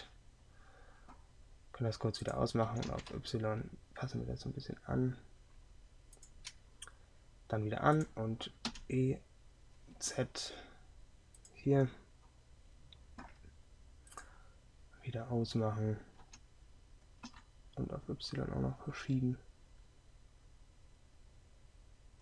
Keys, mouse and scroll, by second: 2.7 g, 8.8 e.